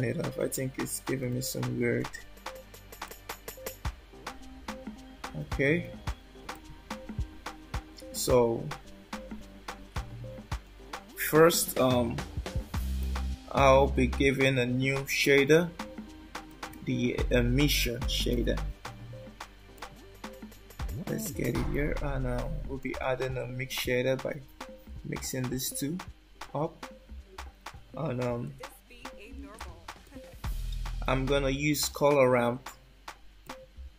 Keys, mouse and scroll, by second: 1.3 alt+middle click, 2.1 scroll up 2, 3.1 alt+middle click, 6.5 click, 8.9-11.0 scroll down 7, 11.0-13.5 scroll down 1, 15.2 shift+a, 16.1 shift+a, 21.0-21.7 typing, 22.8 ctrl+shift+right click, 26.4 click, 28.4 click, 30.0 click, 32.0 shift+a.